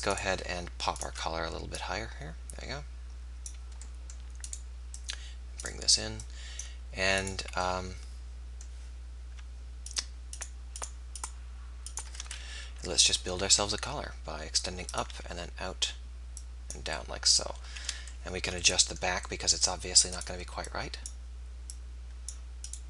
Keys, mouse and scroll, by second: 1.9 middle click, 2.8 click, 4.5-7.8 middle drag, 5.0-8.0 drag, 5.0-7.8 right drag, 12.6 KP_1, 13.4 e, 15.2 e, 20.1 click, 20.6 right click, 21.8 click.